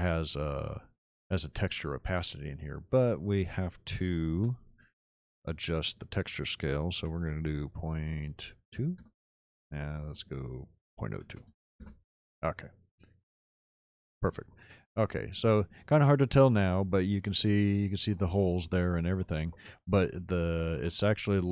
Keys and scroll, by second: 4.3 m, 6.9 ., 8.5 KP_2, 9.0 Return, 11.1 ., 11.2 KP_0, 11.5 KP_2, 11.9 Return.